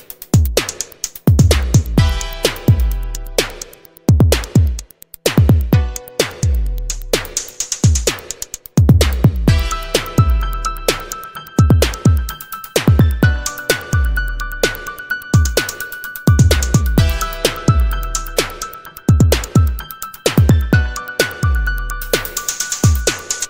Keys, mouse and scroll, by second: 0.5 0, 2.6 click, 3.2 scroll up 1, 3.8 scroll down 1, 5.7 click, 6.7 click, 7.9 click, 10.3 click, 11.1 click, 13.9 right click, 14.7 Escape, 17.7 click, 18.5 click, 20.4 click, 22.7 7, 23.3 2.